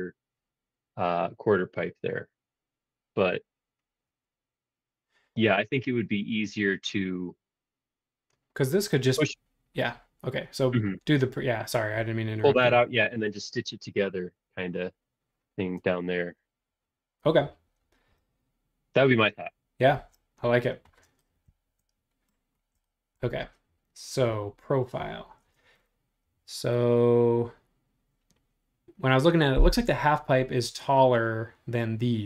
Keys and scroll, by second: 20.0 super+Tab.